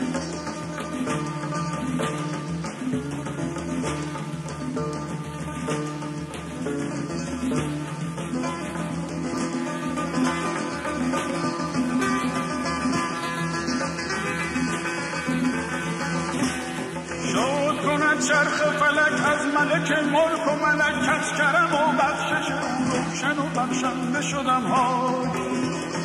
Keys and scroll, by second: 3.2-5.7 typing, 7.7-9.8 typing.